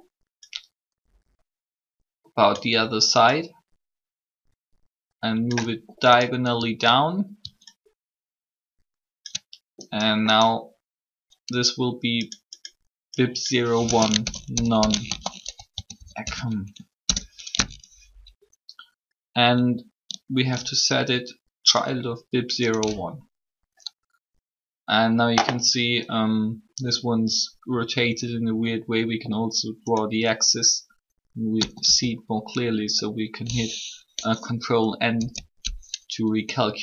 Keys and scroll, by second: 13.7-17.3 typing, 31.5 a, 35.0 ctrl+n.